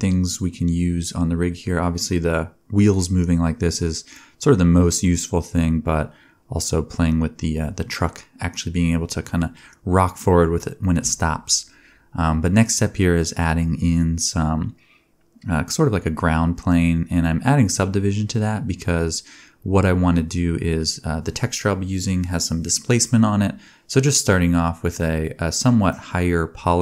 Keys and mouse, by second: 2.1 ctrl+Tab, 3.0 shift+a, 4.1 Tab, 4.2 s, 5.8 middle click, 6.1 s, 6.6 s, 9.2 2, 9.2 click, 9.8 middle click, 10.2 ctrl+r, 10.2-13.9 ctrl+drag, 10.2-11.4 ctrl+right drag, 11.2 a, 12.7 shift+r, 13.9 alt+middle click, 14.0-15.2 drag, 14.5 g, 15.2 e, 17.0 g, 17.8-23.6 alt+drag, 19.5 e, 20.4 g, 20.7 g, 22.1 ctrl+z, 22.3 x, 22.9 alt+right click, 23.3 g, 23.6-25.6 middle drag, 24.1 g, 25.8 shift+middle click, 25.9 shift+click, 26.1 Tab.